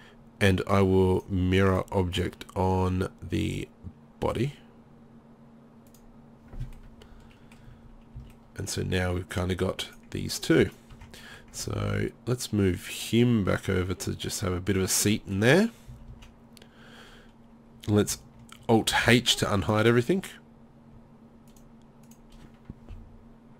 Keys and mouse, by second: 7.7 z, 7.8 z, 8.0-9.2 middle drag, 8.3 z, 10.0 drag, 10.9 Tab, 11.6 Tab, 14.8-15.1 right drag, 15.9 z, 16.1 z, 18.9 alt+h, 20.9 middle click.